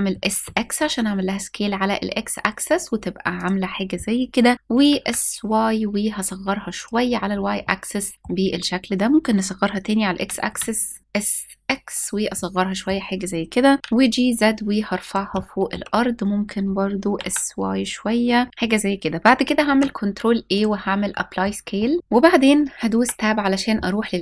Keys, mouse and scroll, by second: 0.0 x, 3.0 click, 4.5 s, 4.6 y, 6.4 click, 6.7 scroll up 2, 6.9 scroll down 1, 7.0-7.4 scroll up 2, 7.2-8.1 middle drag, 8.1-9.7 scroll down 2, 9.7-10.1 scroll down 1, 9.7 s, 10.1 x, 11.6 click, 12.0-12.5 middle drag, 13.7 g, 14.7 click, 14.9 shift+scroll up 1, 15.0-15.4 shift+middle drag, 15.6-16.5 scroll up 1, 16.5 s, 16.8 y, 18.3 click, 19.3 ctrl+a, 20.8 middle drag, 21.4-21.8 shift+middle drag, 22.0-22.6 scroll up 3, 22.6 Tab.